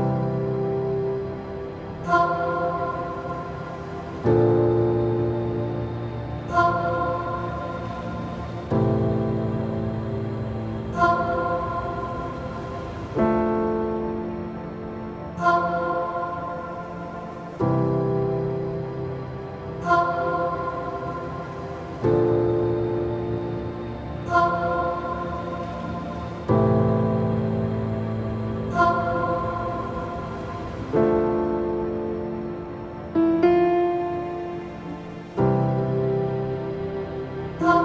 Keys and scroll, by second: 6.6 space, 27.7 ctrl+z.